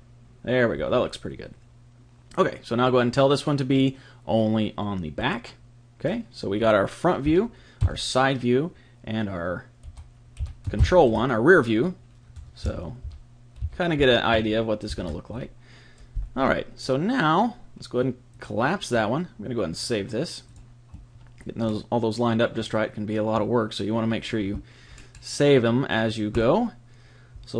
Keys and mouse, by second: 3.7 click, 6.0-8.0 middle drag, 7.2 KP_1, 7.8 KP_3, 9.8 KP_7, 10.4 KP_1, 12.6 KP_3, 13.0 KP_1, 13.6 KP_3, 15.3 KP_1, 18.3-21.5 drag, 21.6-26.3 middle drag, 26.3 click.